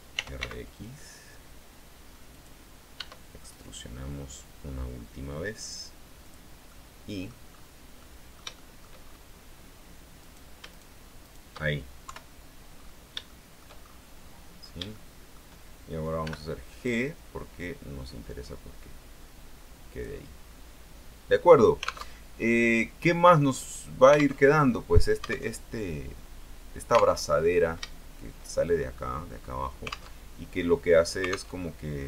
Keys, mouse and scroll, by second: 0.1-1.1 typing, 2.5 click, 3.1 e, 6.4 click, 6.8 middle click, 8.2-9.2 middle drag, 9.2-9.5 shift+scroll up 2, 10.4 right click, 10.9 shift+right click, 11.4 shift+right click, 12.2 KP_3, 12.8-13.3 scroll down 2, 13.4 shift+middle click, 14.0-14.5 shift+scroll up 2, 14.7-15.1 scroll down 1, 15.1 shift+middle click, 16.4 g, 20.0 click, 20.5-21.0 scroll down 1, 21.6 scroll down 1, 22.2 alt+Tab, 23.0 scroll down 1, 23.6-24.0 scroll up 2, 24.6 alt+Tab, 25.6 alt+Tab, 27.4 alt+Tab, 29.5-29.9 scroll up 2, 30.3 alt+Tab, 31.7 alt+Tab.